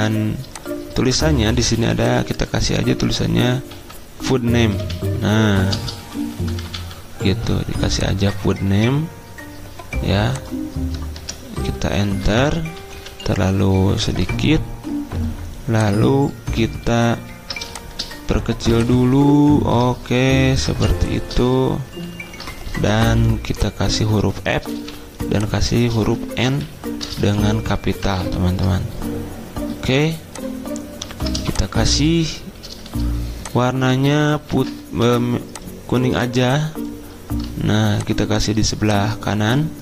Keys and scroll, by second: 5.7-6.3 typing, 10.9-12.5 typing, 12.8 Down, 12.9 Down, 13.1 Down, 21.9 alt+Down, 22.0 alt+Down, 23.0 t, 24.7 f, 26.3 n, 27.3 ctrl+a, 28.0 alt+Down, 28.3 alt+Down, 31.4 i, 38.0-38.8 typing.